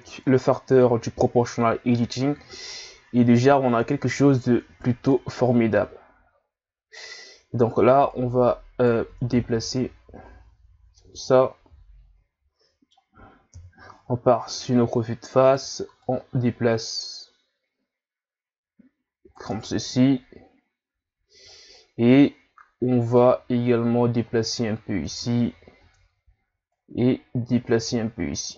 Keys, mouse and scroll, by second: 0.3-0.7 scroll down 1, 0.7 a, 2.3-3.6 scroll up 2, 3.6 ctrl+scroll down 1, 4.1 Tab, 5.1 right click, 8.1 right click, 9.1 ctrl+z, 9.6 Tab, 10.3 scroll down 2, 11.0-13.5 middle drag, 13.5 KP_1, 14.4 scroll up 1, 14.5 Tab, 15.4 right click, 16.0 click, 19.5 Tab, 21.5-22.1 scroll up 2, 22.1 Tab, 23.2 right click, 25.1 Tab, 25.8 Tab, 26.7 right click, 28.4 right click.